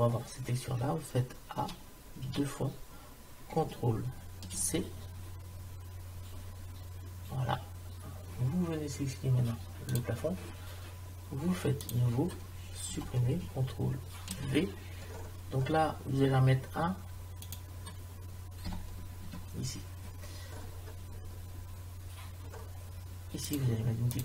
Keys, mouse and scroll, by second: 1.7 a, 2.3 a, 4.6 ctrl+c, 9.9 click, 12.9 Delete, 14.3 ctrl+v, 15.3 middle click, 17.6-19.3 drag, 20.7-22.6 middle drag, 23.5 click.